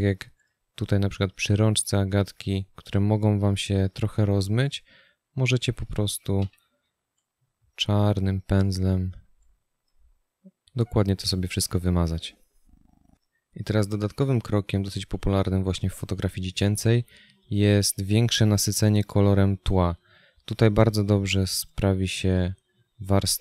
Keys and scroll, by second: 6.7 x.